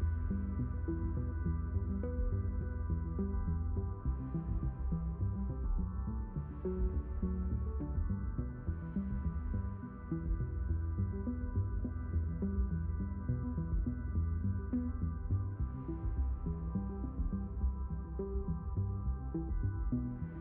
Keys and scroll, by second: 14.5 shift+h, 18.2 shift+h.